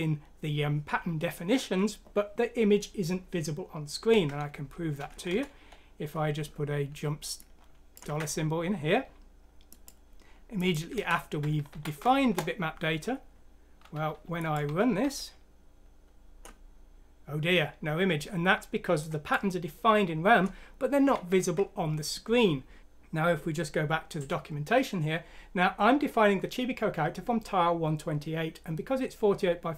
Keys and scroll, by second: 5.7 Down, 8.0 ctrl+c, 10.9 ctrl+v, 11.7 F6, 12.2 Return, 14.6-15.0 typing, 21.1 ctrl+z.